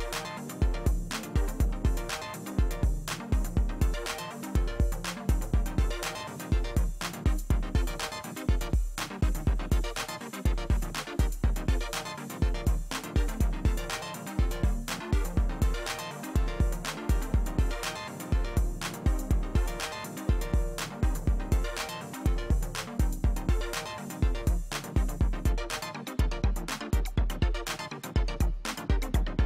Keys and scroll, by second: 12.4 space, 14.8 space, 21.8 space.